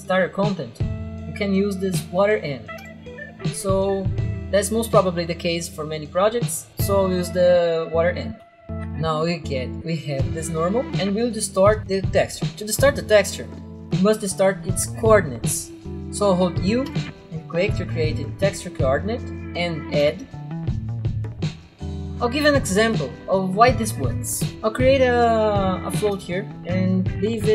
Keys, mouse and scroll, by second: 2.8 click, 8.7 click, 8.9 right click, 9.5 click, 10.3 right click, 10.9 click, 16.7 u, 16.9 click, 18.1 click, 19.6 Delete, 19.8 a, 20.1 click, 20.8 click, 21.4 click, 21.7 click, 21.8 click, 26.0 1, 26.2 click.